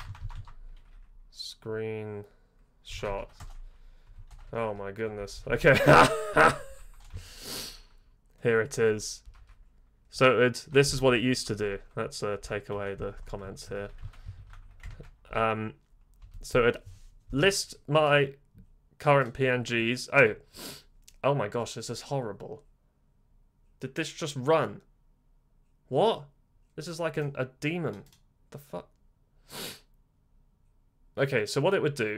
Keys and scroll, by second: 0.0-0.3 typing, 2.6-3.5 typing, 4.2 ctrl+-, 4.4 ctrl+-, 4.6 ctrl+-, 5.1 j, 5.3 j, 5.4 j, 5.6 space, 6.6 typing, 9.2-10.1 typing, 11.0 ctrl++, 12.4-16.2 typing, 14.8 ctrl+[.